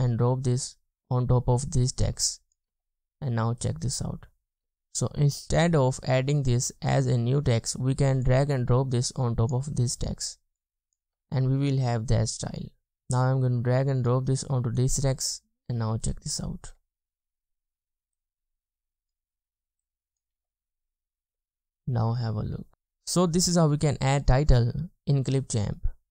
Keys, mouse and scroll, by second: 2.7 space, 4.7 space, 11.2 space, 12.5 space, 12.9 scroll down 1, 16.8 space, 17.0-18.3 scroll down 1, 20.6 space.